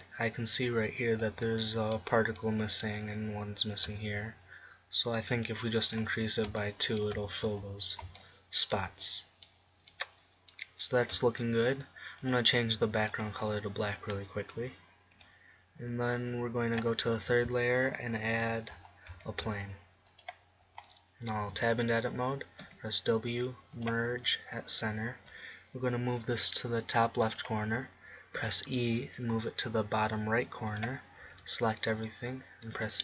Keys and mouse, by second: 2.5 middle click, 3.2 middle click, 5.6 middle click, 6.2 click, 6.8 middle click, 7.4 click, 8.4 middle click, 10.4 middle click, 13.1-15.5 drag, 15.5 middle click, 16.0-17.7 drag, 17.7 middle click, 20.0 shift+a, 22.3 Tab, 23.5 w, 26.0 g, 28.1-29.5 drag, 29.1 e, 30.1-31.5 drag, 31.9 a, 32.2 a.